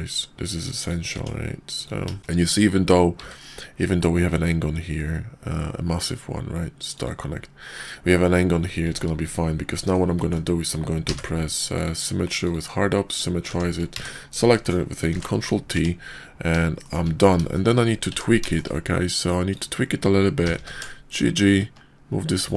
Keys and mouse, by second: 1.1 Tab, 1.7 click, 3.1 q, 8.9 Tab, 9.4 middle click, 10.1 alt+x, 12.4 click, 13.5 Tab, 13.9 a, 14.5 click, 15.1 ctrl+t, 15.7 Tab, 16.8 shift+click, 17.5 shift+click, 18.1 Tab, 18.5 shift+drag, 19.4 click, 20.4 g.